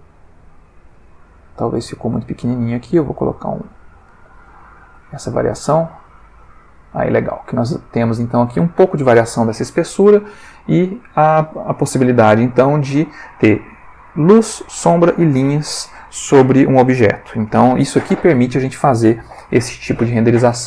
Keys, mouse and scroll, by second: 1.6 click, 2.5-4.3 drag, 4.5 F12, 8.2 click, 10.4-11.3 ctrl+middle drag, 12.1 v.